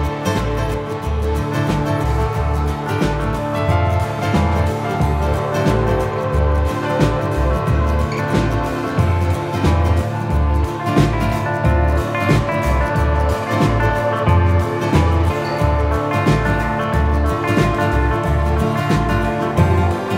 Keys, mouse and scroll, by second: 4.3 click, 8.3 click, 11.9 shift+middle click, 13.3 s, 15.1 middle click, 16.5 g, 17.5 middle click, 19.9 s.